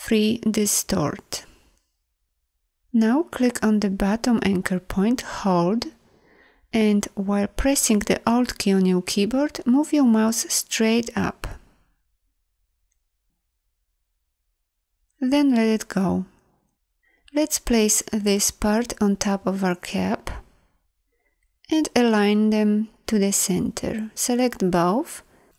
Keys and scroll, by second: 19.6 v.